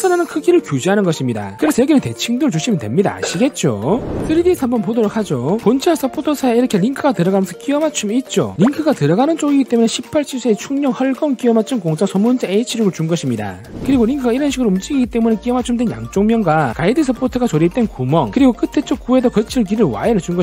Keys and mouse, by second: 14.4 click, 19.9-20.4 drag.